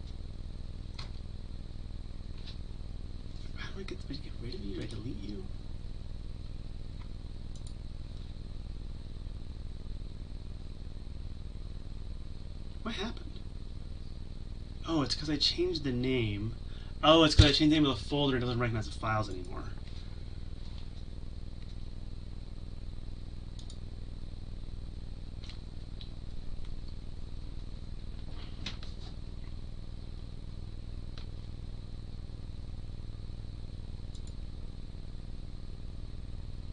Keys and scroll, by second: 19.4 Delete.